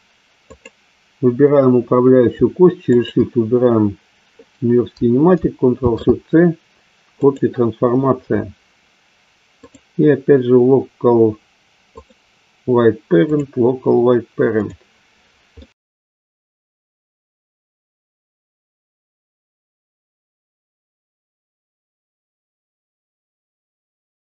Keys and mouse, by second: 0.6-1.6 drag, 2.9-4.0 shift+drag, 9.6-12.1 drag, 13.3-14.7 drag, 15.5-15.9 middle drag, 16.6 shift+click, 17.0 shift+c, 18.5 shift+c, 19.6 click, 20.2 click, 21.6 click, 22.3 click, 22.8 click, 23.2-23.6 drag, 23.7 shift+click, 24.0 shift+c.